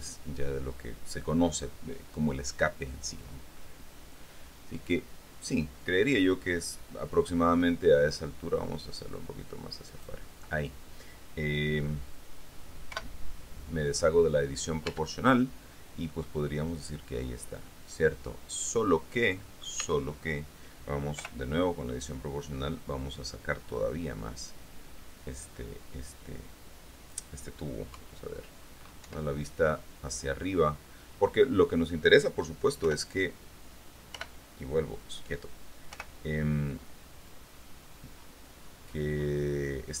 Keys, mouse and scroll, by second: 7.8-10.5 drag, 13.1 o, 15.1 Tab, 16.1 scroll down 2, 16.3-20.0 drag, 20.0 Tab, 21.3 o, 22.2-23.8 drag, 23.8-24.4 scroll up 1, 28.1 KP_3, 29.2 KP_7, 33.0 o, 34.3 p, 36.1 o, 37.5-38.5 drag, 39.1-40.0 scroll down 2.